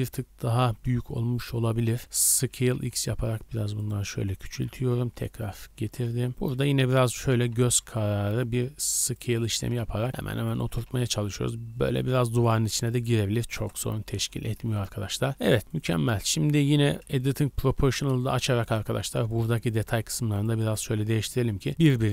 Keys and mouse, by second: 0.0-0.8 typing, 2.4 s, 4.4 g, 5.8 s, 6.3-12.6 drag, 6.5 g, 7.4 g, 9.6 s, 10.1 g, 10.6 s, 13.5 KP_0, 14.1 z, 14.4 a, 14.6 a, 16.5 Tab, 17.2-18.6 shift+middle drag, 18.8 middle click, 19.4 middle click, 19.8 middle click, 19.9-22.1 typing, 20.7-22.1 drag.